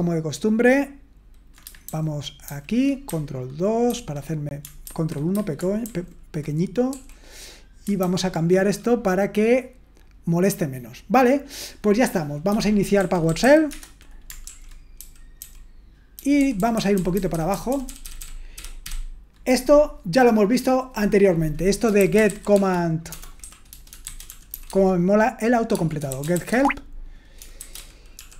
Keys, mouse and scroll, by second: 1.9 super+h, 2.5 super+h, 3.9 ctrl+2, 4.8 ctrl+1, 12.2-13.9 typing, 14.4 super+l, 14.9-18.5 typing, 20.7-22.0 drag, 21.8-28.3 typing.